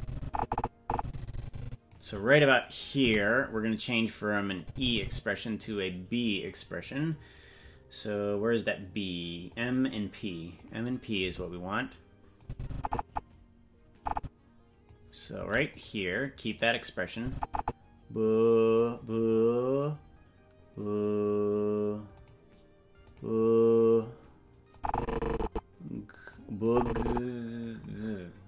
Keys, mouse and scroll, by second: 3.0 i, 4.6-5.6 drag, 9.5-10.7 drag, 12.4-14.9 drag, 15.3 l, 17.1 i, 17.1-18.8 drag, 22.2 click, 23.0 click, 24.7-26.3 drag, 26.6-27.6 drag.